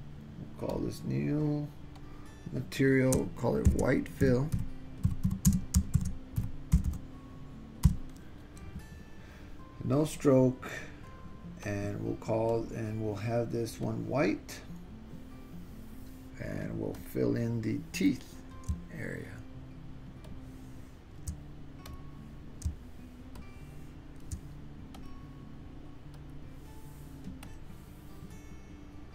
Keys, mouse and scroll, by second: 0.9 click, 2.1-9.2 drag, 6.9 l, 10.1 click, 11.7 click, 12.6 click, 17.0 click, 20.3 shift+middle click, 21.9 click, 23.4 shift+middle click, 25.0 click, 26.2 click, 27.5 click.